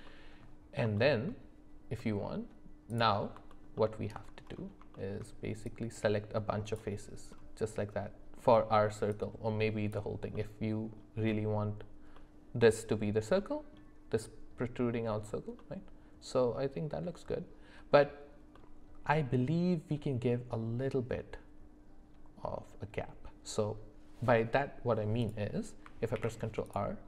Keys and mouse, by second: 0.0 middle click, 0.9 shift+middle click, 2.0 middle click, 2.9 click, 3.5 alt+middle click, 4.9 shift+middle click, 5.6-6.8 drag, 9.1 click, 10.3 middle click, 12.1 middle click, 13.4 middle click, 15.6-16.9 middle drag, 18.5 middle click, 25.2 click, 26.1 ctrl+r.